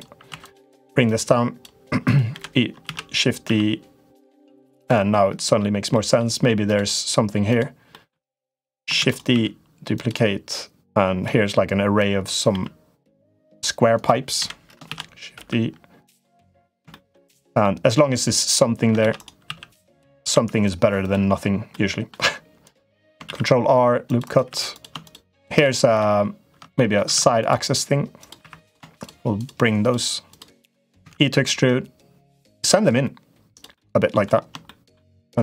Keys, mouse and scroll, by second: 0.2 2, 0.2 click, 0.9 click, 1.9 click, 2.1 l, 2.7 shift+d, 5.0 middle click, 5.8 middle click, 7.3 click, 7.6 middle click, 8.1 3, 8.2 click, 8.7 shift+d, 9.1 s, 10.3 click, 11.8 click, 12.3 e, 13.7 click, 14.2 l, 14.6 shift+d, 16.3 middle click, 16.7 shift+middle click, 17.5 middle click, 17.9 click, 18.8 shift+d, 19.2 s, 20.1 e, 21.6 middle click, 23.0 ctrl+r, 24.4 3, 24.5 click, 24.8 shift+click, 26.5 middle click, 26.9 ctrl+r, 28.4 3, 28.4 click, 28.8 shift+click, 29.1 shift+click, 29.6 shift+click, 30.1 click, 30.4 click, 30.8 e, 33.6 middle click, 34.5 shift+middle click.